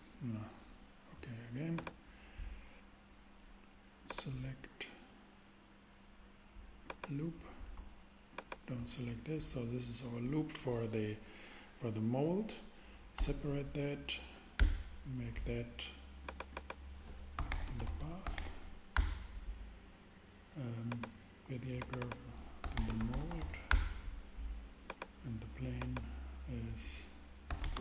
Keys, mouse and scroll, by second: 13.1 p, 14.6 Return, 16.2 click, 17.3-18.3 typing, 18.9 Return, 22.6-23.4 typing, 23.7 Return, 27.5-27.8 typing.